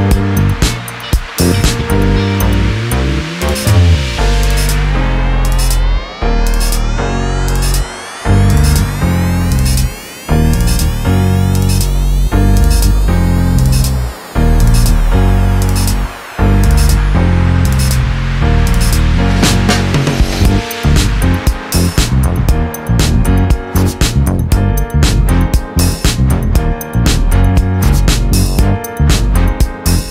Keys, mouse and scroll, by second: 1.8 click, 2.9 click, 3.2 click, 4.7 shift+click, 6.2 ctrl+g, 7.2-9.6 ctrl+drag, 9.9 ctrl+d, 10.3 ctrl+click, 10.9 ctrl+d, 11.4-14.3 ctrl+drag, 14.5 ctrl+click, 15.7 click, 16.8 Delete, 18.2 click, 19.2 ctrl+d, 20.3-21.2 drag, 22.5 click, 23.2 click, 24.2 KP_5, 24.3 KP_0, 24.5 KP_Enter, 27.1 click, 28.8 click.